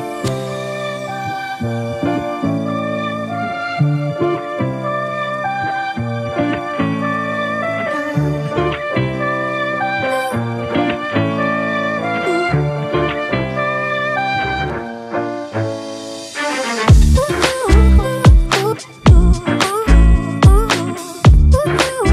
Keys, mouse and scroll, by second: 0.7 alt+shift+click, 3.0 Up, 3.2 Up, 3.9 Down, 4.4 Return, 11.0 ctrl+t, 14.0 Right, 15.1 Right, 15.5 Right, 15.7 Right, 15.8 Right, 16.1 Return, 21.4 ctrl+click.